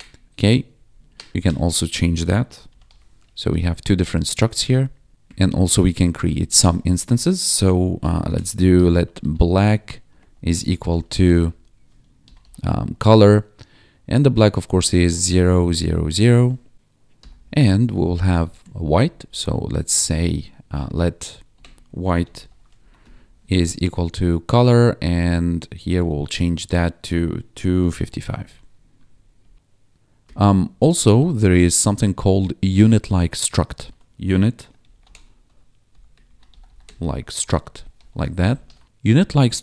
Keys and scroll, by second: 0.3 ctrl+s, 0.5 Left, 1.3 Right, 1.3 ctrl+shift+Left, 1.9-3.7 typing, 3.9 ctrl+Right, 5.2 Return, 5.8 ctrl+Down, 7.7-13.3 typing, 14.8-17.1 typing, 17.6 Left, 17.9 alt+shift+Down, 18.4 ctrl+s, 18.5 Left, 20.4 Right, 21.1 Right, 21.8-22.9 typing, 22.9 Escape, 23.3 Right, 23.8 ctrl+Right, 24.6 Right, 25.4 shift+Right, 26.3 ctrl+d, 27.5 2, 27.8 5, 28.3 ctrl+s, 28.7 Escape, 29.0 Right, 29.4 Down, 30.3 Return, 30.4 Tab, 31.1 BackSpace, 33.7 ctrl+/, 34.3-38.4 typing, 38.6 ctrl+s.